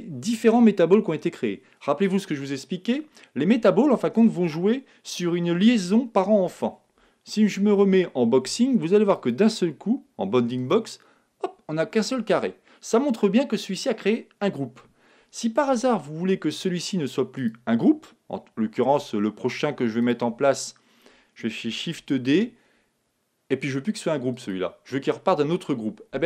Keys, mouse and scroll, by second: 9.1-11.0 drag, 11.2-13.1 middle drag, 17.3-19.2 drag, 22.0 shift+d.